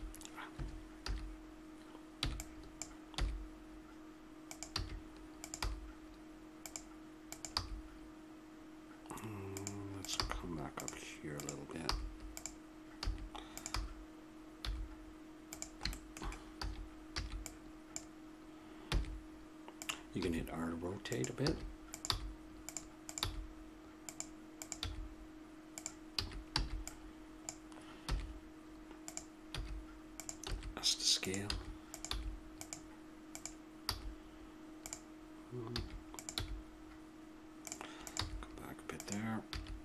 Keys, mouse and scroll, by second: 1.0 a, 2.2 b, 3.1 e, 4.8 a, 5.4-7.2 drag, 5.6 g, 7.3-8.3 drag, 7.5 g, 10.0-12.3 drag, 10.2 g, 11.8 g, 13.0 a, 14.6 g, 15.9-17.0 drag, 16.5 a, 17.2 b, 17.9 click, 18.8 e, 20.1 r, 21.4 a, 21.9-24.0 right drag, 22.1 g, 23.2 g, 24.8 g, 26.2 a, 26.6 b, 28.1 e, 29.6 r, 30.5 s, 31.5 a, 31.9 right click, 32.1 g, 33.9 g, 35.7 a, 36.3 g, 38.2 g, 39.5 a.